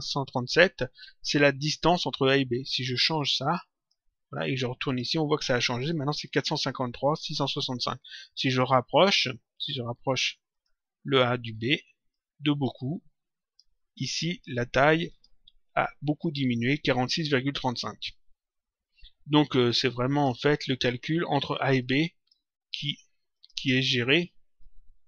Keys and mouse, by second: 1.6 click, 3.1 click, 4.8 click, 10.5 click, 12.1 click, 15.0 click, 19.6 click, 21.7 click, 23.3 click, 24.6 click.